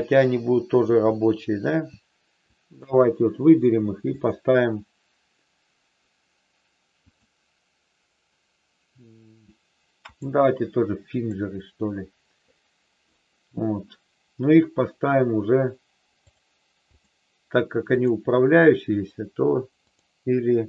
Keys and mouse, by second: 2.4 shift+click, 4.0 click, 7.2-10.2 drag, 11.0 click, 17.9 click.